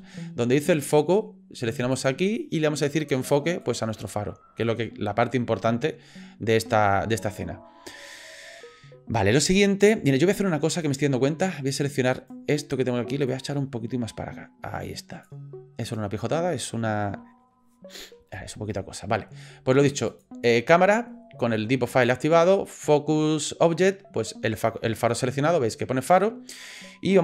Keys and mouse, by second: 1.9 click, 12.1 click, 13.3 click, 15.4 click, 15.9-20.2 drag.